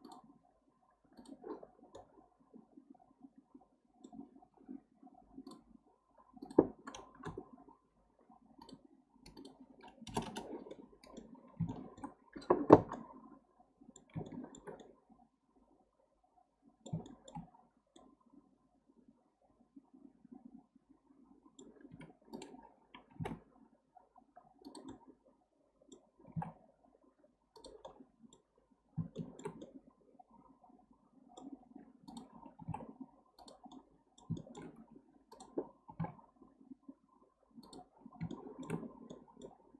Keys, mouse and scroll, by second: 0.0 click, 1.2 click, 1.6 scroll down 1, 1.9-4.3 middle drag, 4.3-5.1 scroll up 3, 5.5-8.5 drag, 8.6-10.7 drag, 10.7-17.5 middle drag, 17.5-18.0 scroll up 3, 18.0-21.0 middle drag, 22.3 click, 23.1 g, 24.9-26.3 middle drag, 26.3 g, 27.9-32.1 middle drag, 32.1 click, 32.6 g, 33.7-35.3 middle drag, 35.3 drag, 35.9 g, 38.3 shift+middle click, 38.8-39.1 scroll down 1, 39.1-39.7 middle drag.